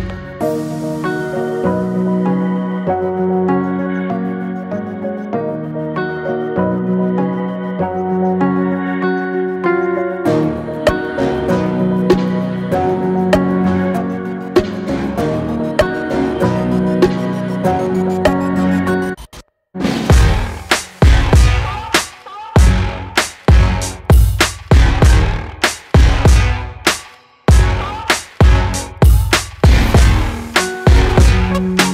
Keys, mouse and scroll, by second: 4.0-5.1 middle drag, 5.4 alt+middle click, 5.5-7.2 alt+scroll up 2, 7.2 click, 8.0 scroll up 1, 10.4 shift+click, 11.2 shift+middle click, 12.2 shift+click, 13.3 shift+click, 14.5 shift+click, 16.0 shift+click, 17.4 shift+click, 19.7 shift+click, 20.3-20.8 shift+scroll down 3, 21.0 middle click, 21.7 scroll up 1, 22.5 x, 23.6 middle click, 23.9 scroll down 2, 24.1 Tab, 25.1 click, 25.5 click, 28.9-30.6 drag, 30.6-31.9 middle drag.